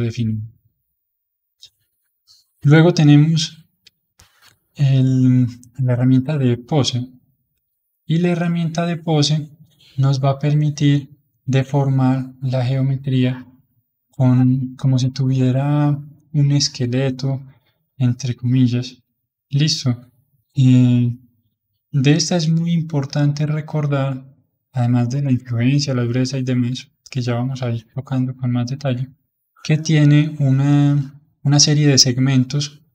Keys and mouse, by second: 2.6 click, 3.4-10.7 middle drag, 10.7-32.9 drag.